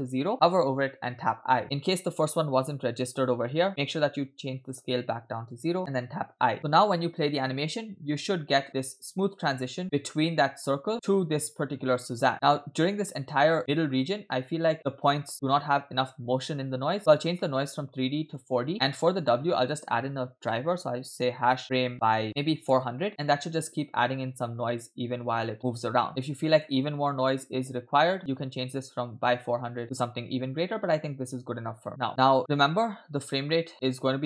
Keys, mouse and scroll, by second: 1.6 i, 1.6 click, 3.3 click, 4.6 click, 6.5 i, 7.0 space, 12.3 space, 12.9-14.9 drag, 17.0-17.3 scroll up 5, 17.4-18.5 drag, 18.7 middle click, 19.2-22.8 drag, 22.4 0, 23.1 space, 26.0 space, 26.1 space, 26.1 click, 26.1 space, 26.9 space, 31.8 space, 32.1 space, 32.4 space.